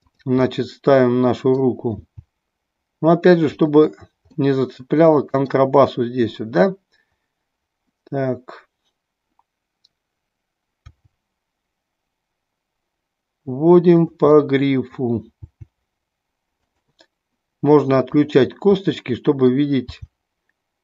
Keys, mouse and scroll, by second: 0.4-1.6 middle drag, 4.4-5.5 middle drag, 14.2 click, 14.3-15.0 middle drag, 16.8 click, 18.0 drag, 18.9 middle click.